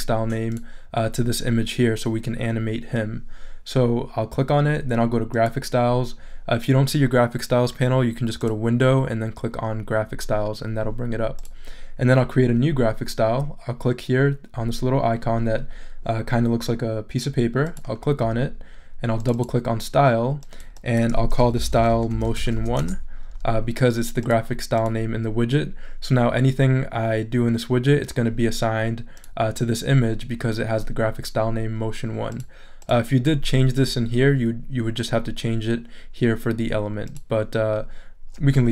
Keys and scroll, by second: 21.3-23.0 typing.